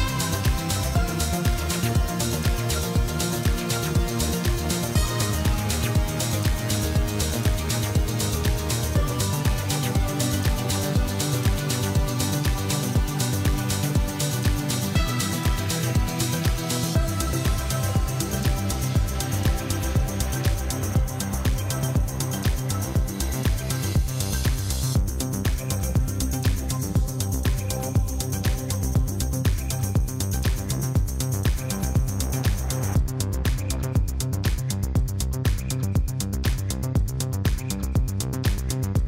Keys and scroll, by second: 0.5 Tab, 1.8 1, 2.2 shift+z, 5.0 g, 5.7 x, 8.3 shift+z, 11.0 Tab, 22.3 Tab, 28.2 i, 34.0 i.